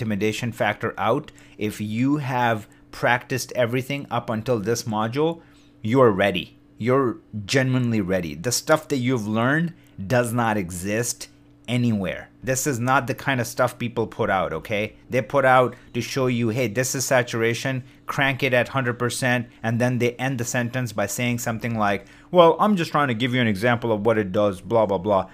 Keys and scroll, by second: 14.1 shift+d, 21.4 shift+d.